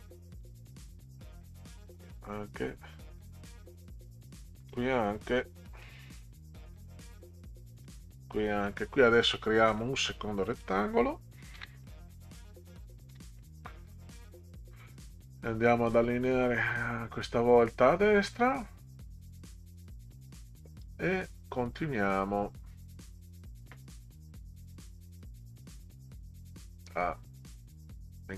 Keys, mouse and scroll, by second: 0.4 click, 1.8 Delete, 2.3 scroll down 4, 4.2 click, 4.6 Delete, 5.2 scroll down 2, 6.7 click, 7.8 Delete, 9.7 click, 10.5 click, 11.6 ctrl+c, 12.2 click, 13.1 ctrl+v, 14.4 middle click, 15.2-19.5 drag.